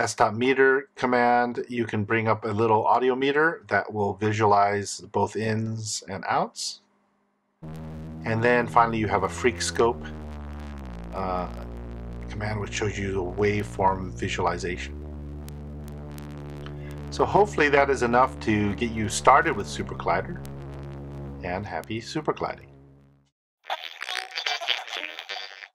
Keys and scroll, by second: 7.3 super+Return, 12.8 super+Return.